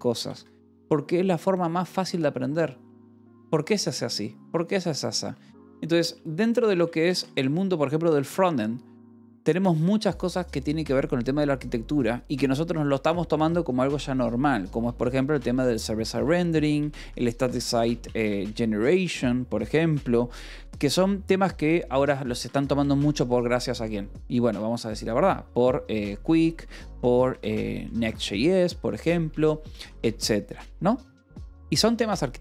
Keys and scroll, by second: 0.0-0.1 typing, 0.3 Escape, 5.5 o, 6.0 BackSpace, 6.7 Return, 7.1 -, 7.3 space, 15.5 Escape, 15.9-18.7 typing, 19.6 Escape, 22.3 a, 22.4 space, 23.4 (, 25.7-29.3 typing, 29.9 Escape, 32.2 shift+v.